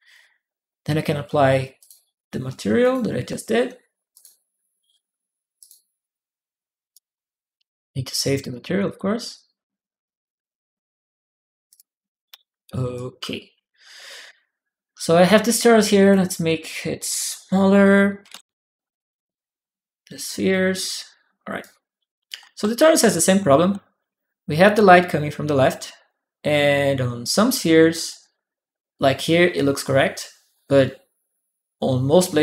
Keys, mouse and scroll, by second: 1.6 click, 2.6 click, 3.9 click, 5.4 click, 6.6-7.4 typing, 6.7 click, 8.2 click, 9.1 click, 11.5 click, 12.7 right click, 12.9 w, 13.3 w, 13.3 right click, 13.7 right click, 14.1 right click, 14.1 q, 14.5 right click, 14.7 click, 14.7 s, 15.8 click, 16.9 click, 20.2 click, 21.4-23.6 drag, 21.4-23.6 right drag, 22.3 e, 23.5-24.5 typing.